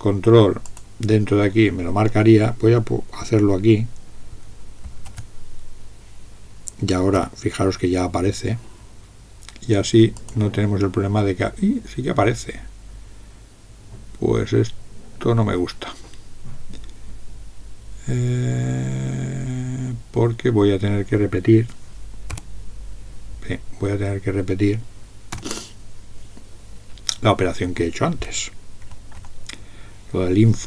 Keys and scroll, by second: 7.2 n, 22.3 n, 25.4 BackSpace, 28.8 Up, 29.2 Up.